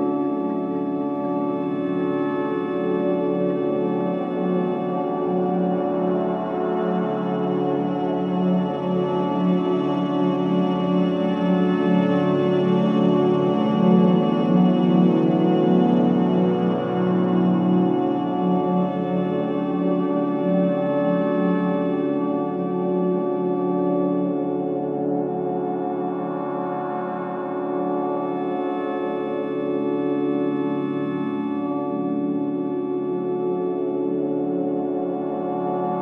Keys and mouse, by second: 2.4 click, 5.6 Tab, 6.6-10.1 typing, 10.5 Tab, 13.0-16.4 drag, 18.3 click, 20.0-22.3 drag, 23.3 click, 25.6 click, 28.7-29.4 typing, 30.9 typing, 31.3-36.0 drag.